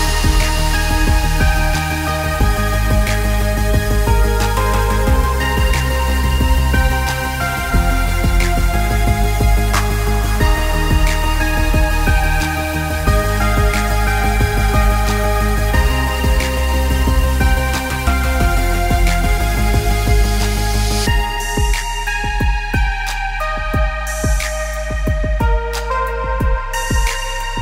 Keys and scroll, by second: 6.9 p, 9.5 p, 11.0-12.2 typing, 12.4 Return, 13.6 e, 17.3 Escape.